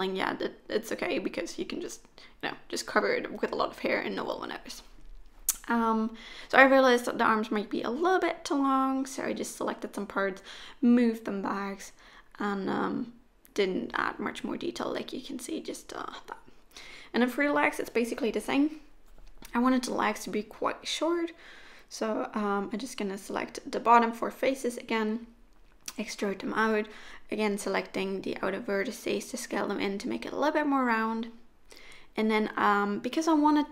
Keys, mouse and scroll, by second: 0.7 g, 2.3 click, 3.1 g, 6.3 click, 7.6 middle click, 10.0 z, 10.8 middle click, 12.7 3, 13.1 click, 13.5 shift+click, 13.8 shift+click, 14.1 click, 14.4 e, 16.5 s, 18.5 1, 18.8 click, 19.5 shift+click, 20.0 middle click, 20.9 shift+click, 21.8 shift+click, 22.6 s, 26.5 middle click, 28.8 3, 29.3 click, 29.8 shift+click, 30.3 shift+click, 30.6 shift+click, 31.0 middle click, 32.1 s.